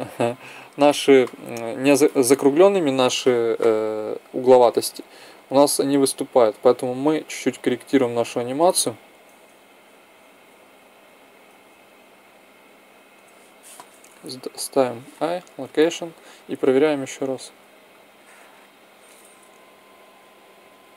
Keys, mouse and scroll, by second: 7.7 g, 14.4 i, 16.5 click, 18.0 middle click, 19.3 Right, 19.6 Right, 19.8 Right, 20.0 Right, 20.3 Right, 20.6 Right, 20.9 Right.